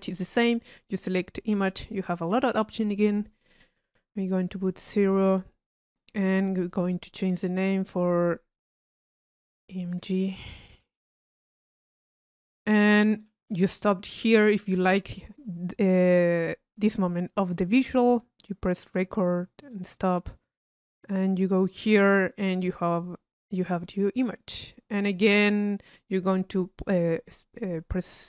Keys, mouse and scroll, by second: 0.3 click, 1.6 click, 3.3 click, 4.5-5.9 drag, 6.7-8.0 drag, 13.1-26.5 drag.